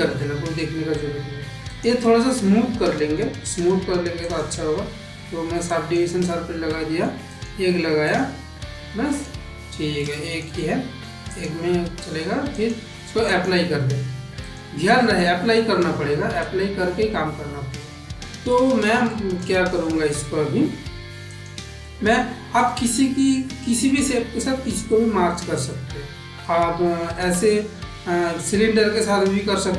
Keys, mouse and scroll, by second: 0.1 middle click, 1.5 click, 1.9-3.0 middle drag, 3.3 click, 4.1-5.8 drag, 6.5-6.9 middle drag, 7.9 click, 8.3-9.1 middle drag, 9.8-10.3 shift+middle drag, 10.4-10.9 middle drag, 11.1 click, 12.3-13.3 drag, 14.3 click, 14.7 middle click, 16.5 shift+middle click, 16.9-17.5 middle drag, 17.7 middle click, 18.4 middle click, 18.9 shift+middle click, 19.7 g, 21.7-22.5 middle drag, 22.7-23.7 shift+middle drag, 23.9 middle click, 24.8 shift+middle click, 25.5 middle click, 26.6 shift+a.